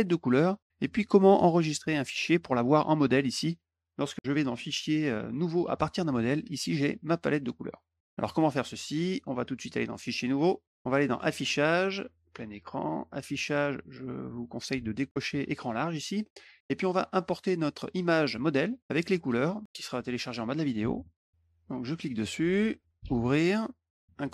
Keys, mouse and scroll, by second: 4.1 click, 5.4 click, 9.7 click, 10.1 click, 11.0 click, 12.0 click, 12.9 click, 17.2 click, 19.5 click, 19.9 click, 21.7 click, 23.0 click, 24.0 click.